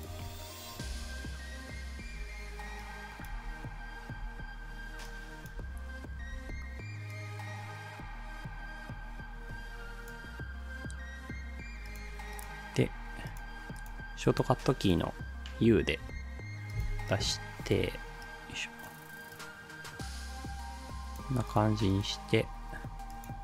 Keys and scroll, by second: 0.9 space, 2.1 space, 3.4 space, 16.0 u.